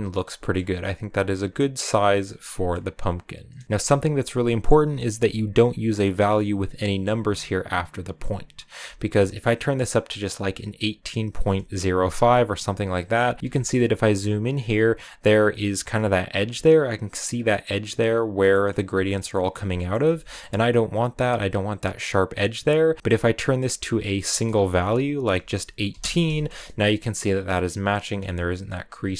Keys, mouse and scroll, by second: 1.3-2.1 scroll up 1, 2.1 middle click, 2.5-3.1 scroll up 2, 3.6 shift+middle click, 3.8 click, 5.9-8.1 drag, 8.6 scroll up 2, 9.0-13.4 shift+drag, 13.4-17.1 ctrl+middle drag, 17.1 scroll down 2, 17.3-25.8 middle drag, 26.7 scroll up 1, 28.6 shift+click.